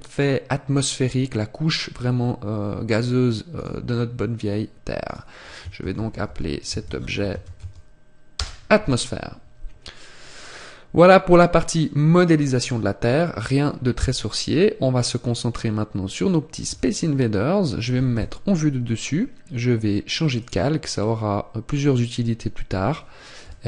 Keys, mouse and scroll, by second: 3.6 click, 10.3 scroll down 1, 12.0 scroll down 2, 16.7 KP_7, 20.4 click, 21.0 scroll down 1, 22.0 scroll down 1.